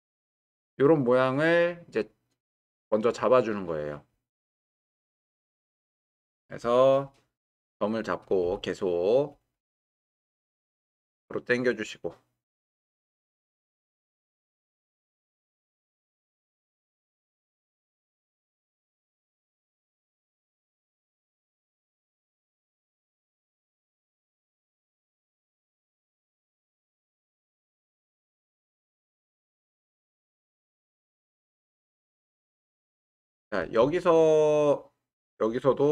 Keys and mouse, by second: 4.2-6.0 drag, 8.4 w, 10.5 g, 10.7 y, 13.0-13.6 drag, 15.3 g, 15.6 y, 17.4 shift+click, 19.1 g, 19.3 y, 21.4 Escape, 22.4 g, 22.6 y, 28.5-28.9 shift+drag, 34.0-35.1 shift+middle drag.